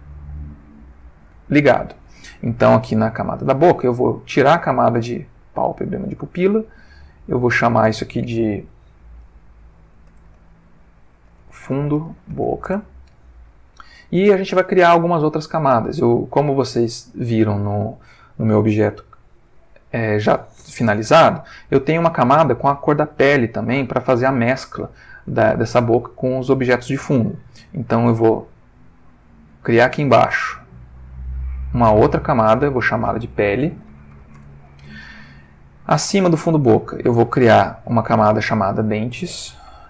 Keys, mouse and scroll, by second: 4.0 click, 5.5 click, 6.1 click, 7.4 click, 10.0 shift+f, 11.3-12.4 typing, 12.6 shift+Return, 28.2 click, 29.5 click, 31.0 click, 32.0 click, 32.6 click, 33.7 shift+p, 33.8 shift+e, 34.0 shift+l, 34.1 shift+e, 34.3 shift+Return, 36.0 click, 37.5 click, 38.3 click, 39.5-39.8 typing.